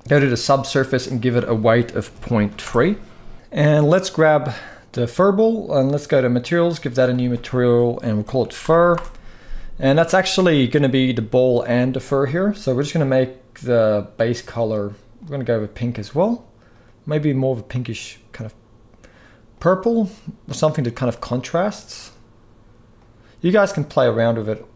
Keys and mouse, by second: 0.7-2.3 drag, 3.7 click, 6.9-8.6 drag.